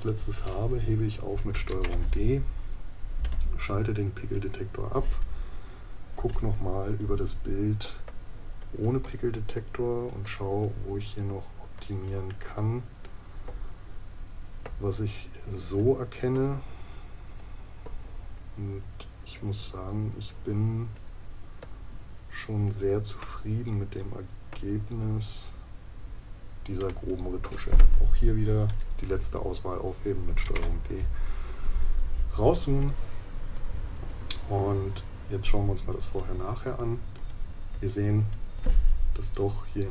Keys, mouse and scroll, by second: 7.8 space, 13.4 space, 32.4 ctrl+KP_Subtract.